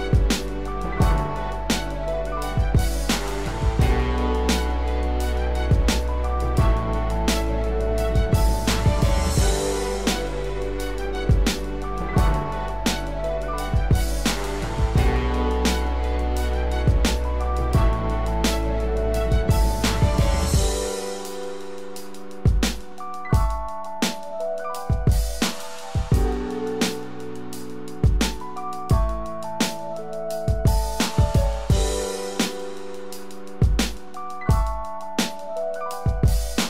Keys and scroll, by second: 3.7 ctrl+=, 4.3 ctrl+=, 33.7 ctrl+0, 34.7 ctrl+=.